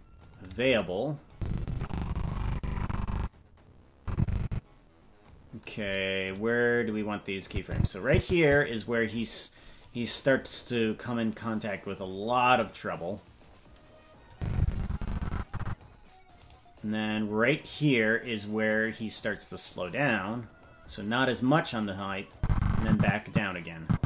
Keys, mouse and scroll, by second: 1.3-5.3 drag, 6.3-7.4 right drag, 7.4-8.6 drag, 9.9-11.1 right drag, 11.1-13.3 drag, 14.3-15.8 drag, 16.5 right click, 17.7 right click, 18.7-20.7 drag, 22.3-24.0 drag.